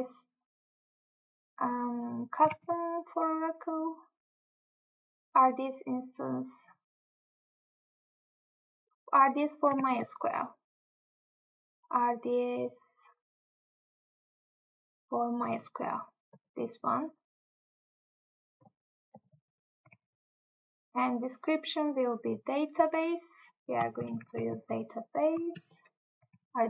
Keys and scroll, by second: 2.5 Tab, 9.8 Tab, 20.0 Tab, 23.8 ctrl+c, 24.4 Tab, 25.4 ctrl+v.